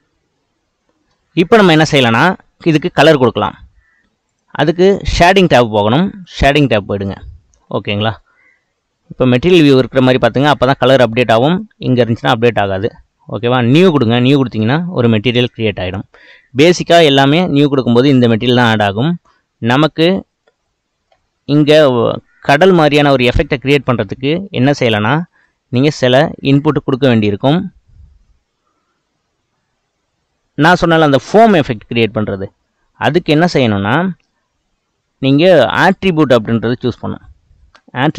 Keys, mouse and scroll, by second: 1.0 space, 2.7-4.3 middle drag, 4.3 click, 6.7 click, 7.3-8.2 scroll down 8, 8.2-11.5 middle drag, 11.5 click, 12.7 click, 13.1-14.3 middle drag, 14.3-19.2 drag, 19.2-21.3 middle drag, 21.3-21.7 scroll up 1, 21.7-38.1 middle drag.